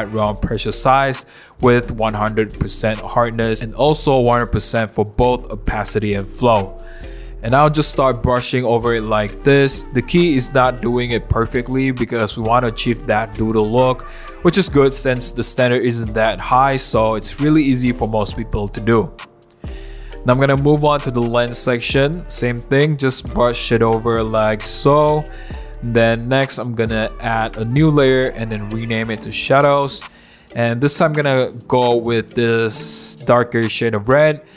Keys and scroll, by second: 7.3 ], 15.4 ], 17.0 [, 17.6 [, 17.9 [, 17.9 [, 19.5-20.4 typing, 22.3 [, 22.4 ], 23.3 ], 23.8 super+z, 25.1 super+z, 26.2 i, 27.4-28.8 typing.